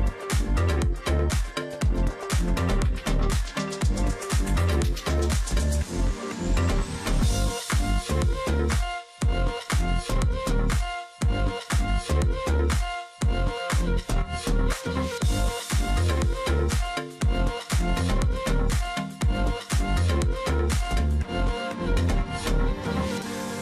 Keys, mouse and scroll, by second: 2.8 ctrl+f, 8.2 shift+click.